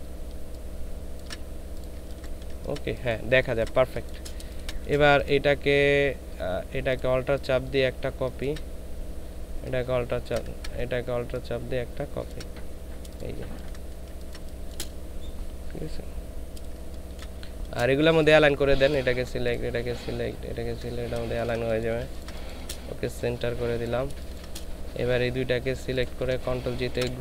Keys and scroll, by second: 1.9 ctrl+alt+shift+space, 2.5 ctrl+alt+shift+space, 13.4 ctrl+space, 14.0 ctrl+space, 16.8 ctrl+space, 21.2 ctrl+shift+space, 22.0 ctrl+shift+space, 24.2 ctrl+space, 26.9 ctrl+g.